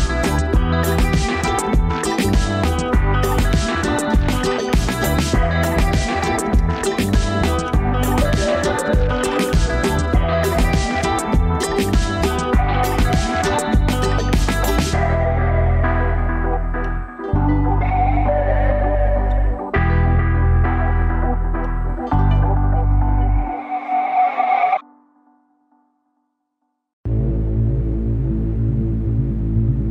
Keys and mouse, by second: 0.7 middle click, 2.8-5.7 middle drag, 10.7-12.0 middle drag, 12.9 Tab, 14.7-15.1 shift+middle drag, 16.2-17.1 shift+middle drag, 18.5 alt+shift+click, 19.8 ctrl+s, 20.4 Tab, 21.5-22.4 middle drag, 29.4-29.9 shift+middle drag.